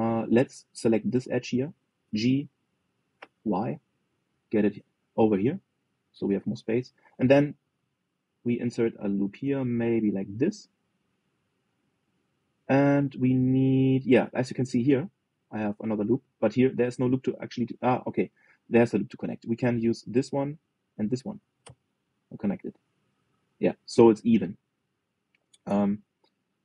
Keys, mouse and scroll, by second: 1.2 click, 1.9 alt+shift+click, 2.7 g, 7.3-8.3 middle drag, 8.3 ctrl+r, 12.2-14.9 middle drag, 14.9 scroll down 1, 15.2-19.3 middle drag, 19.3-20.8 scroll up 1, 20.8 click, 21.6 shift+click, 22.3 f, 22.9-25.4 middle drag, 25.4 scroll down 2, 25.6-26.6 middle drag.